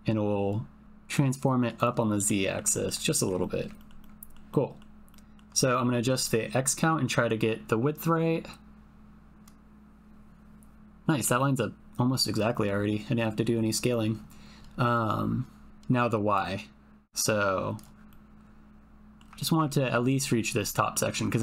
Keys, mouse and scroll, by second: 2.4 click, 3.5 middle click, 4.0 ctrl+middle click, 4.6 middle click, 5.1 alt+middle click, 10.7 ctrl+middle click, 16.3-17.9 drag, 18.2 middle click, 19.7 ctrl+middle click, 20.6 middle click.